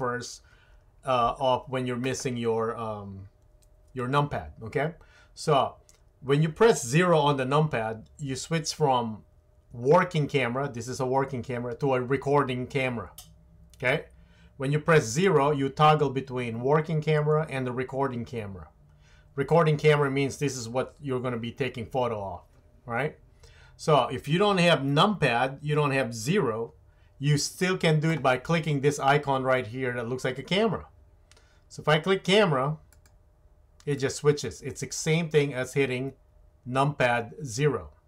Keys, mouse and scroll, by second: 7.6 KP_0, 9.6 KP_0, 11.6 KP_0, 15.3 KP_0, 17.2 KP_0, 32.9 click, 34.0 click.